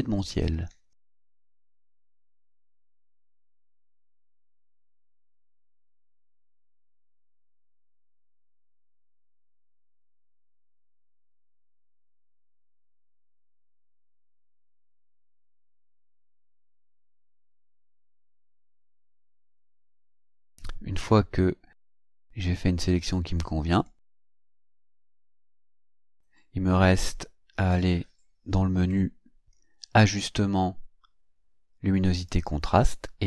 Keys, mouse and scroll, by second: 1.0 click, 3.5-9.2 drag, 9.8-12.9 drag, 14.6-16.8 drag, 17.2-19.8 drag, 23.0 click, 23.9 click, 24.8-26.1 drag, 26.9-27.7 ctrl+scroll down 4, 30.0 click, 32.2 click.